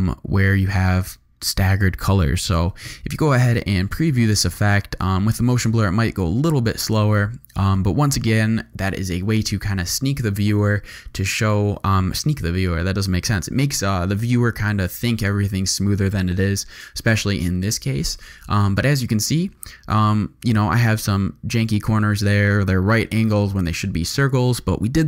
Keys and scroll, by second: 2.4 0.